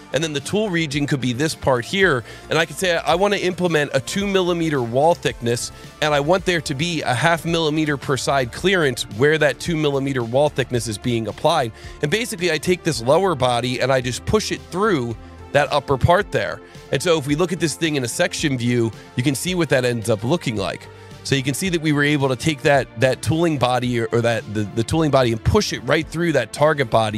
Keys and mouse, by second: 1.3 click, 2.6 click, 3.7 KP_2, 4.3 KP_Enter, 6.3 click, 7.1 KP_0, 7.3 KP_Decimal, 7.5 KP_5, 7.8 KP_Enter, 15.3 click, 18.1 click, 20.2 click.